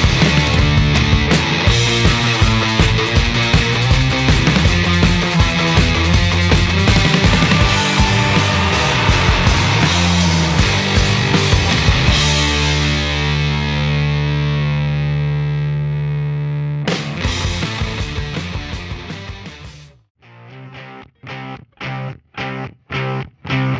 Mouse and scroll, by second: 2.9 click, 4.2 click, 5.7 click, 7.2 click, 10.0 click, 11.3 click, 11.8 right click, 12.5 click, 12.8 right click, 13.8-20.1 drag, 20.3 right click, 23.1-23.7 drag.